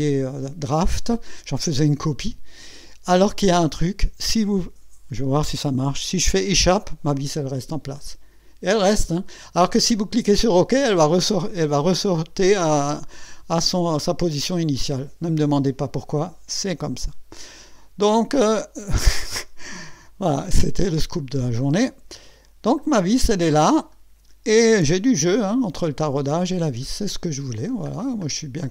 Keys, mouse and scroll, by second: 6.5 Escape, 8.0 click, 21.6 click, 22.8-23.1 scroll up 1, 23.9-24.3 scroll up 1, 26.8-28.3 scroll down 8.